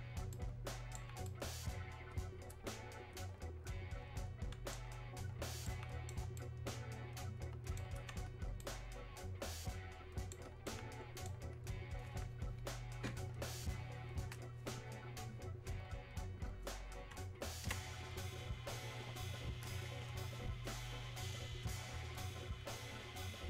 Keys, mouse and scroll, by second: 0.0 alt+right click, 0.3-14.4 alt+right drag, 17.7 space, 18.4 click, 18.5 space, 22.0 right click.